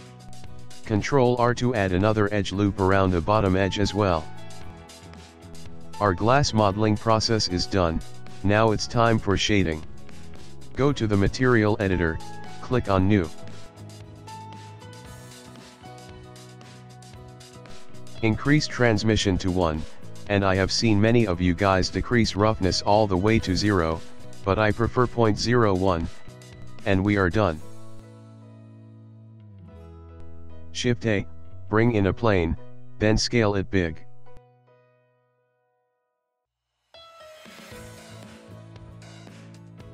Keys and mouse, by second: 0.1 middle click, 1.4 ctrl+r, 4.9 middle click, 5.4 ctrl+middle click, 6.0 shift+middle click, 6.1 shift+middle click, 6.6 ctrl+middle click, 6.8 ctrl+middle click, 7.0 shift+middle click, 7.1 shift+middle click, 7.3 middle click, 7.4 middle click, 7.7 ctrl+middle click, 7.9 ctrl+middle click, 8.1 shift+middle click, 8.2 shift+middle click, 8.3 middle click, 8.6 middle click, 9.3 click, 9.6 middle click, 9.8 middle click, 10.0 Tab, 11.7 click, 12.6 click, 13.6 click, 14.7 click, 14.8 click, 16.0 s, 17.2 click, 19.3 click, 21.0 click, 23.5 click, 26.9 click, 30.1 click, 31.0 shift+a, 33.1 s, 34.5 s, 35.3 g, 38.1 middle click, 39.3 g.